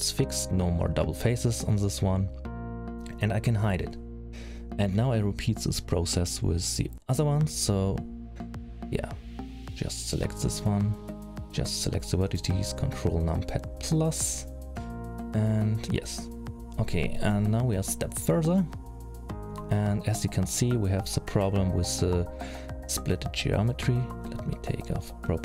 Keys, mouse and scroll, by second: 0.4 middle click, 2.0 h, 2.7 middle click, 3.1-3.4 scroll down 2, 3.6-4.0 scroll up 5, 4.2 scroll down 2, 5.2 middle click, 6.3 middle click, 7.6 l, 8.2 middle click, 10.6 c, 11.9 ctrl+KP_Add, 12.3-13.6 ctrl+KP_Add, 14.6 middle click, 15.8-16.5 scroll down 5, 16.6 middle click, 19.4 middle click, 21.2 click, 22.1 click, 22.9 g, 24.4 click, 24.8 g.